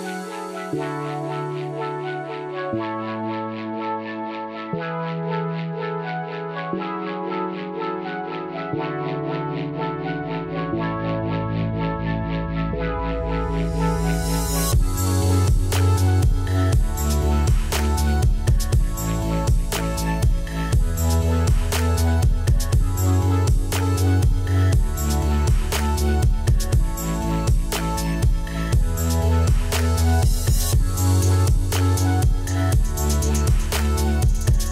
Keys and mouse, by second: 2.2 y, 2.4 click, 2.9 ctrl+click, 3.1 right click, 3.5 click, 4.8 click, 5.6 click, 6.3 Delete, 6.7 c, 7.6 click, 8.3 Escape, 9.0 typing, 9.4 Return, 10.1 click, 12.1 KP_5, 12.1 Return, 13.6 a, 13.8 click, 18.4 KP_3, 18.4 Return, 19.7 click, 24.8 KP_2, 25.2 Return, 27.3 click, 29.0 Escape, 29.1 click.